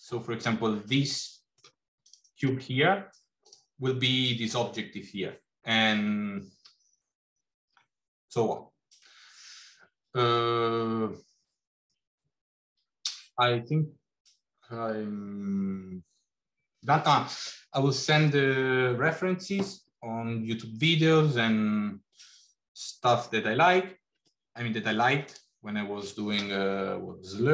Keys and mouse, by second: 0.8-1.6 middle drag, 2.1 click, 3.2 click.